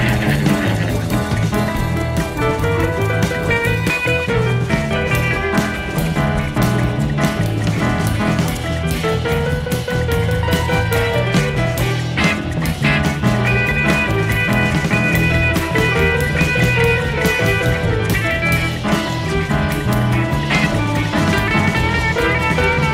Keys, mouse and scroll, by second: 0.0 click, 1.0 click, 2.2 click, 2.8 click, 4.5 F1, 6.9 F7, 7.5 click, 8.9-10.7 drag, 11.0 click, 14.1 F1, 15.6 click, 20.5 click, 21.5 space.